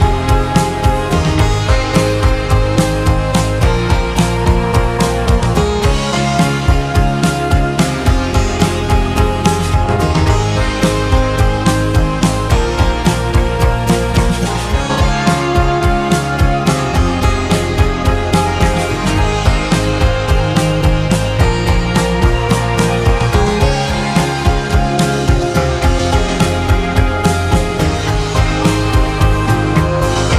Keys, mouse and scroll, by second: 10.2-10.8 scroll up 1, 10.8 shift+middle click, 11.7 1, 12.5-15.1 drag, 18.0-19.1 drag, 19.1 h, 19.6-21.3 middle drag, 21.3 2, 21.5-23.2 drag, 23.2 h, 24.3 ctrl+z, 25.2 f, 26.6-29.0 drag.